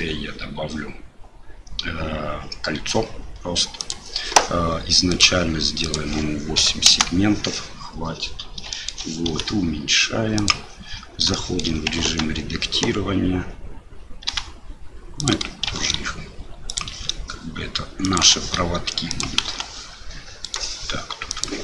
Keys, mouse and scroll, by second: 5.1 click, 5.8-7.3 drag, 8.8 shift+click, 11.4 shift+middle drag, 12.0 Tab, 14.3 g, 15.7 shift+d, 18.3 shift+d, 19.4 s, 21.4-21.6 drag.